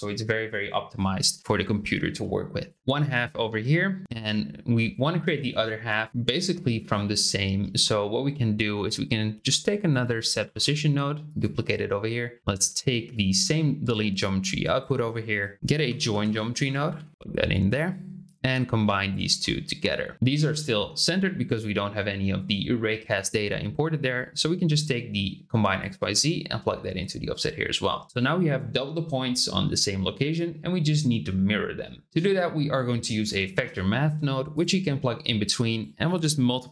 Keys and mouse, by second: 4.4 shift+middle click, 6.3 click, 10.4 shift+d, 13.1-14.8 drag, 15.5 shift+a, 17.7-19.1 drag, 19.5 click, 24.1 click, 25.8-27.4 drag, 32.1 shift+a, 35.6-36.7 drag.